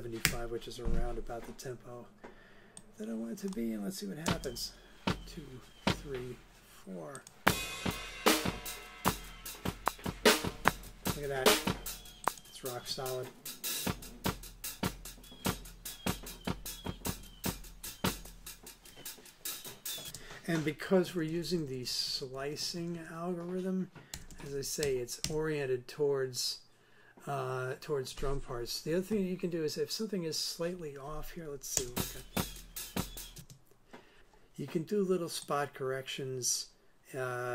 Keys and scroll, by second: 0.2 Return, 4.2 space, 20.0 space, 20.8 super+space, 20.9 super+Right, 24.1 super+Left, 31.7 space, 33.3 space.